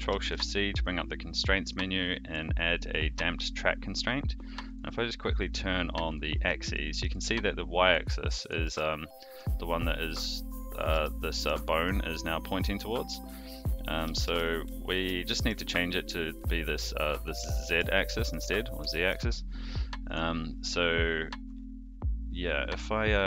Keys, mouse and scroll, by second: 0.1 ctrl+shift+c, 6.0 click, 6.7 shift+middle drag, 8.4 click, 8.6 g, 10.7 click, 10.9 g, 14.0 alt+g, 14.2 alt+r, 15.2 shift+drag, 17.5 shift+drag, 18.2 click, 18.5 click, 18.9 shift+middle drag.